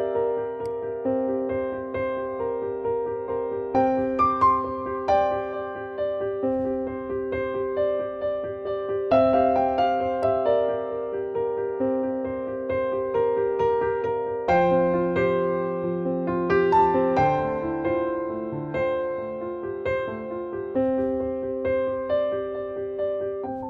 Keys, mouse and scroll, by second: 5.9 ctrl+t, 10.1-15.0 drag, 15.0 Return.